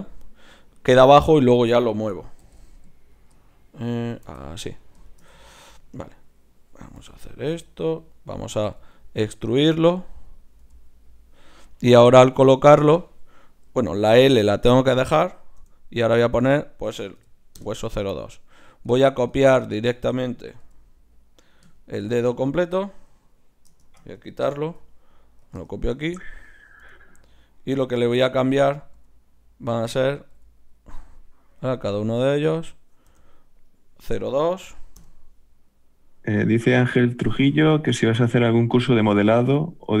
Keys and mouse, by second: 7.0 g, 8.7 e, 10.6 g, 12.0-13.3 drag, 13.3-18.6 right drag, 18.7-23.9 right drag, 20.6 g, 23.8 shift+Tab, 24.7 shift+d, 25.7-27.3 drag, 26.8 g, 27.9 g, 28.9 g, 30.3 g, 31.9-33.5 drag, 35.7-37.4 right drag, 36.4-37.4 drag, 37.4-40.0 middle drag.